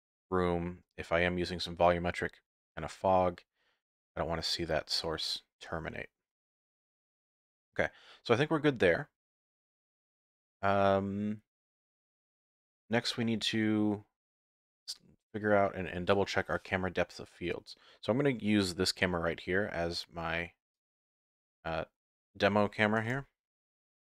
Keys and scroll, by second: 23.1 ctrl+KP_0.